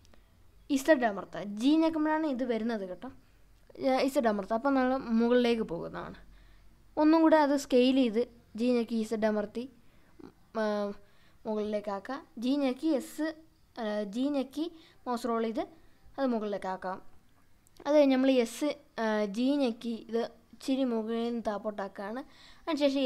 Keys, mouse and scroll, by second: 3.4 click, 4.1 scroll down 1, 4.7 scroll up 1, 5.9 g, 6.5-7.4 scroll down 2, 7.5-8.0 scroll down 1, 7.5 z, 11.5 click, 13.0 click, 14.2-15.5 drag, 16.9 g, 17.5 z, 20.4 typing, 20.7 click, 21.5 s, 22.8 right click.